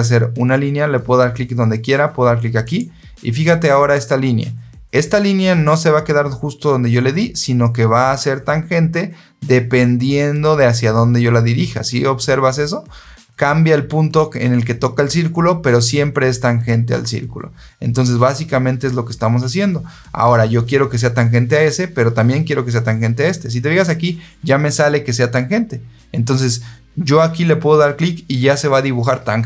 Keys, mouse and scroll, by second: 2.5 click, 5.2 click.